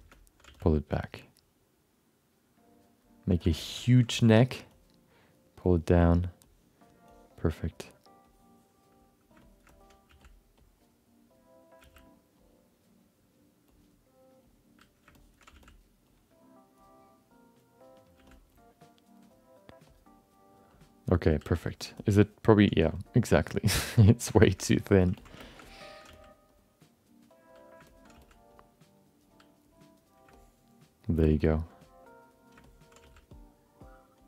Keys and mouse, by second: 0.1 alt+middle click, 0.6 f, 1.0-3.2 drag, 3.3 f, 3.6 shift+middle click, 3.8 alt+middle click, 4.1 ctrl+alt+middle click, 4.8-6.0 drag, 6.5 click, 7.2 click, 8.4 click, 9.4 alt+shift+middle click, 9.7 alt+middle click, 10.0 f, 10.7 click, 11.8 f, 12.5 click, 13.8 click, 14.6 click, 15.2 shift+middle click, 15.5 f, 16.2 click, 17.4 click, 18.1 f, 18.7 click, 20.0 click, 20.9 click, 22.0 alt+middle click, 23.1-24.3 drag, 24.4 shift+middle click, 24.6 alt+middle click, 25.1 ctrl+alt+middle click, 25.4 alt+shift+middle click, 25.6 alt+middle click, 26.0 f, 26.6-27.8 drag, 27.9 alt+middle click, 28.2 f, 28.6 click, 29.7 click, 30.3 alt+middle click, 31.2 alt+shift+middle click, 31.4 middle click, 32.0 click, 32.6 alt+middle click, 33.0 f, 33.4 click.